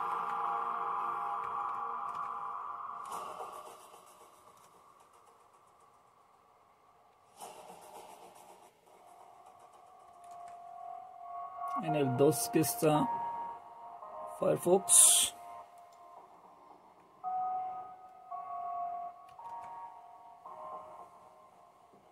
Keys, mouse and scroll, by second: 2.2 super+q, 10.0 super+2, 19.3 super+q.